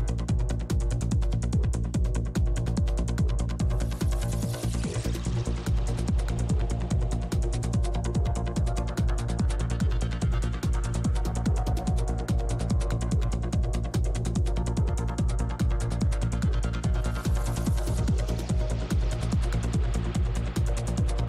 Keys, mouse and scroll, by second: 0.5 middle click, 0.8-3.4 middle drag, 1.2-3.5 drag, 3.4 shift+f, 4.1 click, 7.0-8.3 typing, 7.6 click, 8.5-10.1 middle drag, 10.1 i, 10.4 f, 10.7-14.0 drag, 11.3 shift+f, 12.6 middle click, 13.5 middle click, 13.7 middle click, 14.5 shift+c, 14.5 shift+f, 15.1-16.7 drag, 18.7 g, 18.7 f, 19.0 f, 19.8 click.